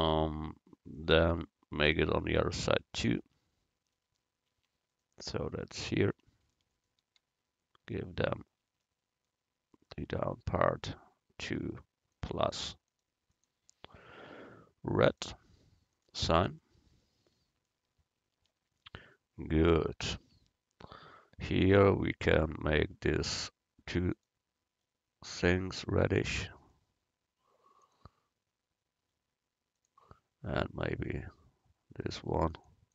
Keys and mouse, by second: 3.3 Tab, 4.6 Tab, 6.2 Tab, 8.2 middle click, 9.9-15.3 drag, 16.0-17.7 drag, 18.9 middle click, 20.3 Tab, 24.2-26.1 drag, 24.2-25.7 right drag, 27.9-29.8 drag, 27.9-29.8 right drag, 32.6-32.9 drag, 32.6-32.9 right drag.